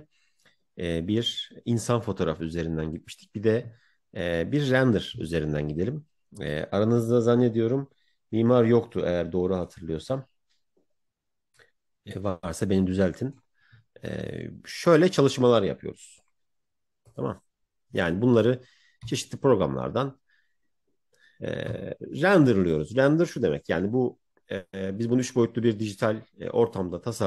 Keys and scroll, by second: 19.0 Right, 21.6 Right.